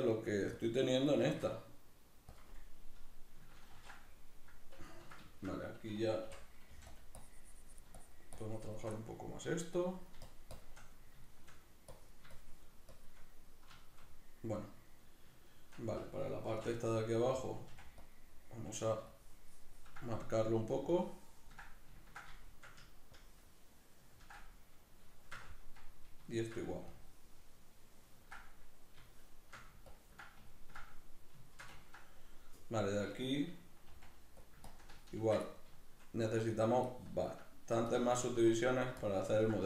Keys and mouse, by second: 3.9 ctrl+r, 4.5 middle click, 5.3 shift+middle click, 6.9 click, 7.9-8.9 shift+drag, 8.9 middle click, 9.7-11.0 drag, 11.0 middle click, 12.0-13.5 drag, 13.5-16.5 middle drag, 16.5 shift+c, 16.8 middle click, 17.7 f, 18.1 click, 18.2 middle click, 19.1-20.2 ctrl+drag, 20.2 middle click, 21.0 ctrl+click, 21.7-23.2 middle drag, 23.2-24.4 ctrl+drag, 24.4-26.9 middle drag, 26.9-28.5 ctrl+drag, 28.5-29.9 middle drag, 29.9 ctrl+click, 30.5-33.9 ctrl+middle drag, 33.9 f, 34.7 ctrl+click, 35.5 middle click, 36.5 middle click, 36.9 ctrl+click, 37.5 middle click, 37.9 ctrl+click, 38.5 middle click, 39.0 ctrl+click.